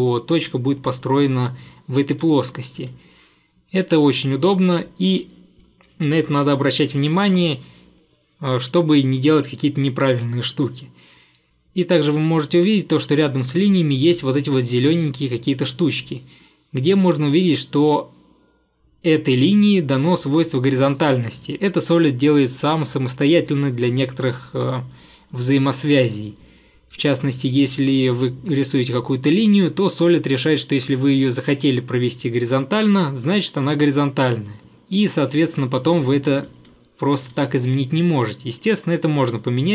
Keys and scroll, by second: 7.4 Escape.